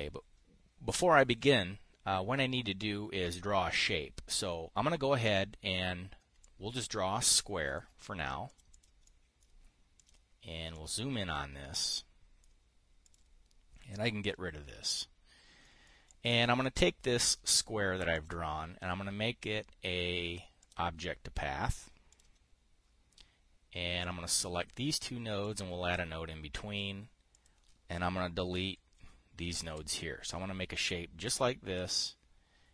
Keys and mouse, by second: 5.7 click, 6.9-8.3 ctrl+drag, 8.4 click, 9.3 click, 9.5 click, 10.5 click, 11.2 click, 12.5 middle click, 13.5 click, 14.4 click, 16.1 click, 16.6 click, 18.6 click, 21.1 click, 22.6 click, 24.5-26.1 drag, 27.8 click, 28.9 Delete, 30.0 click, 30.2 Delete, 32.2-32.7 drag.